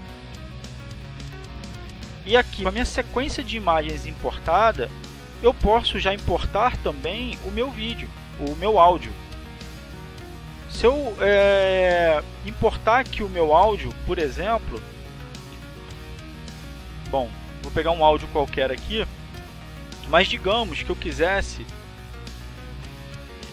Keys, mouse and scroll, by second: 11.4 click, 12.8 click, 14.6 click, 16.2 click, 17.6 click, 18.4 click, 19.7-21.1 drag, 22.0 click.